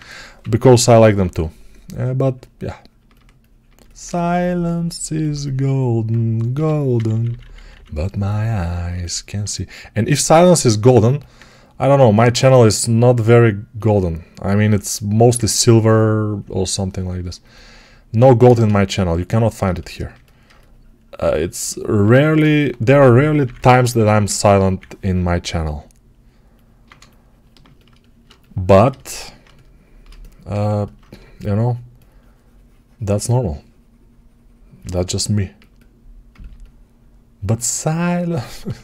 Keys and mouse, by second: 0.3 p, 0.5 [, 0.6 [, 5.2-6.4 alt+right drag, 6.4-17.1 drag, 6.4 g, 6.8 ], 7.0 ], 22.4 1, 23.3-29.9 drag, 23.3 [, 23.4 [, 29.9-38.2 right drag, 38.2-38.8 alt+drag.